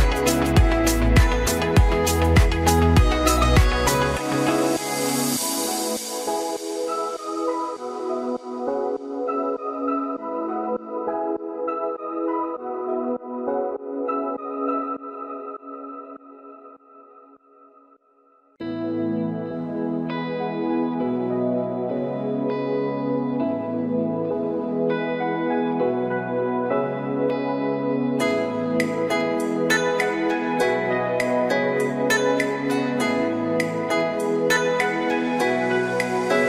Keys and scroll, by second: 16.3 ctrl+d.